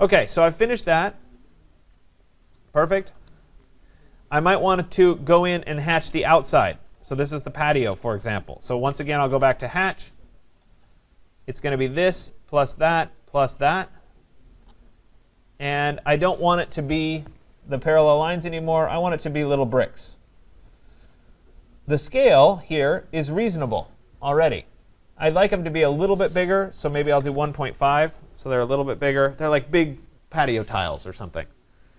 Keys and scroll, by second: 3.1 Return, 4.9 Escape, 9.5 Return, 27.9 Tab.